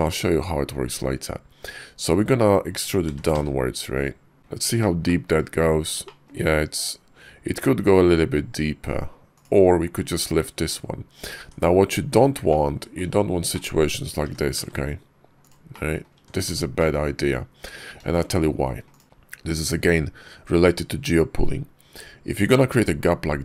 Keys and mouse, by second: 1.5 Tab, 2.9 e, 4.4 `, 4.4 KP_5, 4.9 shift+click, 5.9 shift+click, 9.1 click, 9.9 click, 10.4 Tab, 11.2 Tab, 12.3 click, 13.4 click, 14.1 g, 15.6 click, 16.0 Tab, 16.6 middle click, 17.1 KP_5, 18.0 shift+click, 18.8 click, 19.0 g.